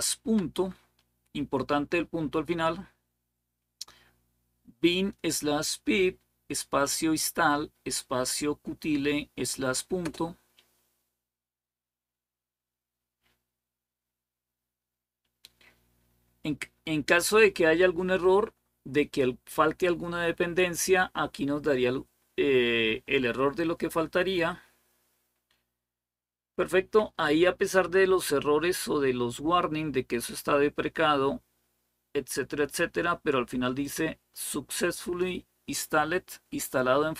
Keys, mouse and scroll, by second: 33.6-35.7 drag.